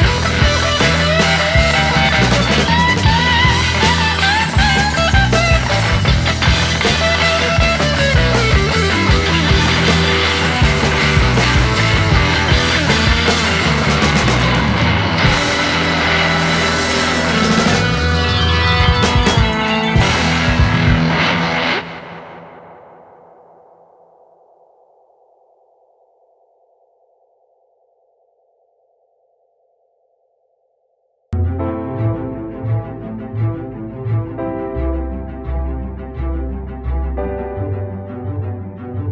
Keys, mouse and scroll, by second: 23.7 alt+right click.